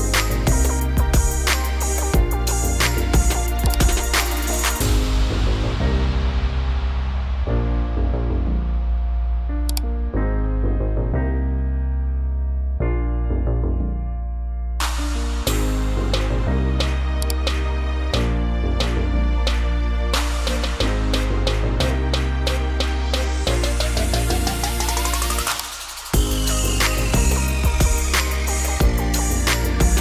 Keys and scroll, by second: 0.0-0.4 typing, 5.6 -, 6.3 1, 6.5 0, 11.3 2, 12.1 0, 18.1 3, 18.4 0.